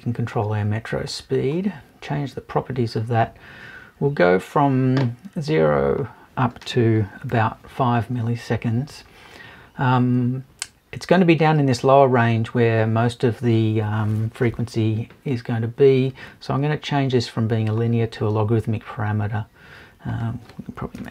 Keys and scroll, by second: 21.0 BackSpace.